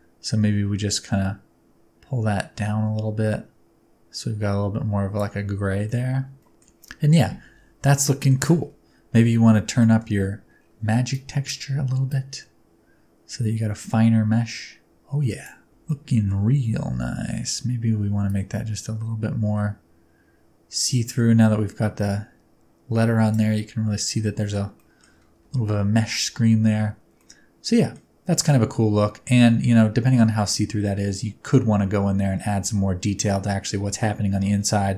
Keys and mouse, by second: 5.8 middle click, 6.4 middle click, 7.9-8.3 middle drag, 9.8 middle click, 11.2 click, 12.1-15.5 drag, 15.8-16.3 middle drag, 18.4-23.3 drag, 24.4 shift+middle click, 24.9 middle click, 27.2-28.0 middle drag, 29.4-30.3 middle drag.